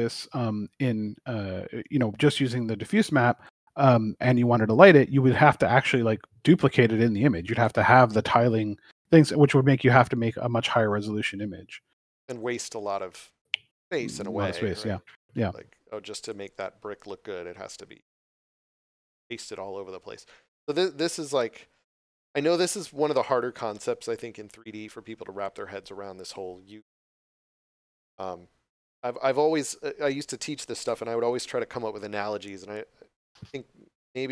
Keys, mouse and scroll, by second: 1.5 s, 16.1 click, 21.0 scroll down 1.